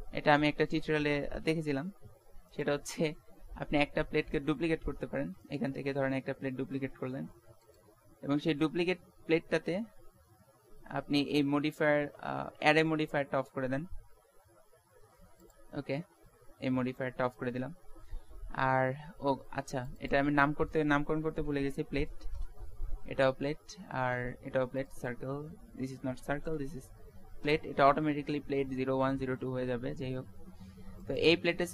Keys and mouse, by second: 4.6 z, 5.2 z, 5.8 z, 7.0 shift+d, 8.4 z, 14.8-16.5 drag, 19.7-22.5 drag, 24.8-27.0 drag.